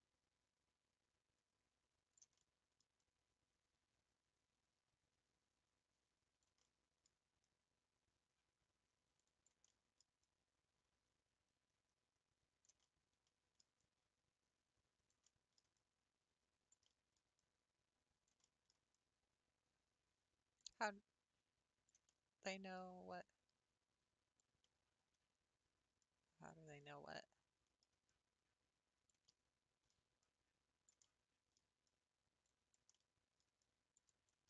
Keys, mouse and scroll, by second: 2.3 middle click, 3.0-6.6 drag, 6.6 middle click, 7.0-7.4 scroll down 3, 7.4-9.6 drag, 9.6 middle click, 10.1 scroll up 1, 10.2-12.8 drag, 12.8 middle click, 13.8-15.2 drag, 15.2 middle click, 15.7-16.9 drag, 16.9 middle click, 17.3 scroll up 1, 17.4-18.4 drag, 18.4 middle click, 18.9-22.0 drag, 22.0-23.2 middle drag, 23.2-24.6 drag, 24.6 middle click, 25.1-25.5 scroll up 3, 26.0 click, 26.9-28.1 middle drag, 28.1-29.3 drag, 29.3 middle click, 30.2 click, 31.0 middle click, 31.9-32.9 drag, 32.9 middle click, 33.6 click.